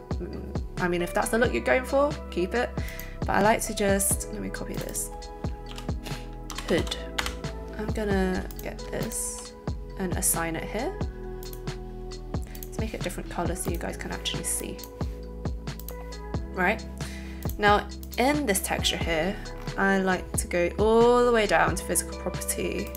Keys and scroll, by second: 6.2-7.2 typing.